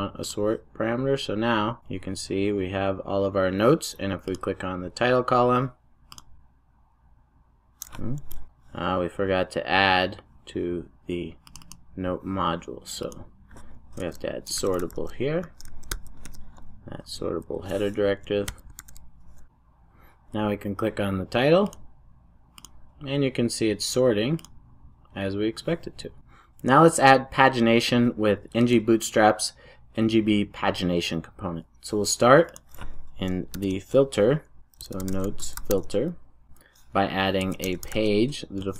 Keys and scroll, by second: 16.2 Return, 18.7 super+s, 33.4 ctrl+shift+super+o.